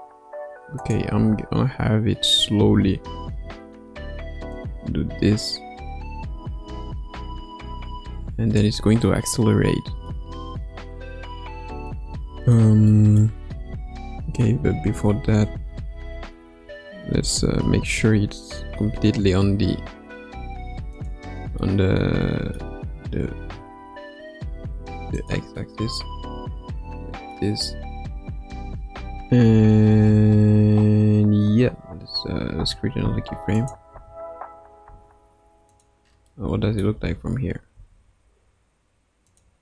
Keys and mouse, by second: 0.7 click, 1.1 space, 2.7 space, 4.5-8.6 drag, 9.0-10.1 middle drag, 11.9-12.5 middle drag, 12.9-13.7 middle drag, 13.7 KP_9, 14.7 KP_1, 15.5 KP_9, 16.5 KP_1, 18.1 r, 22.1 middle click, 23.3 r, 26.4-27.4 middle drag, 32.6 i, 33.5 click, 33.9 space, 34.8 space, 36.3 middle click, 37.5 space, 37.7 space, 39.2 click.